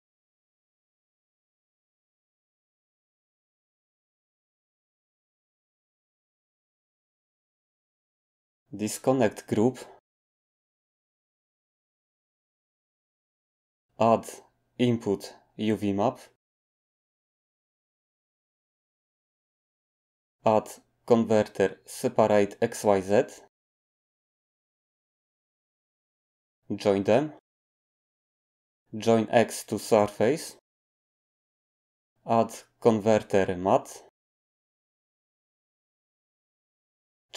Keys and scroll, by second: 0.1 Return, 3.9 typing, 14.4 a, 21.0 shift+a, 32.3 shift+a.